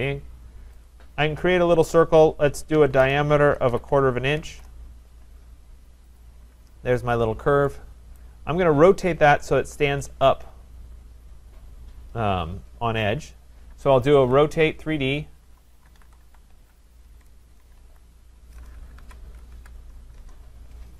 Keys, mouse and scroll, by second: 0.9 click, 2.8-4.9 typing, 6.2 click, 7.3 click, 8.2 Return, 8.2 click, 8.4 right click, 9.1-10.1 scroll, 10.5 scroll, 14.2 r, 15.2-18.3 typing, 19.0 Down, 19.5 Down, 20.2 Return.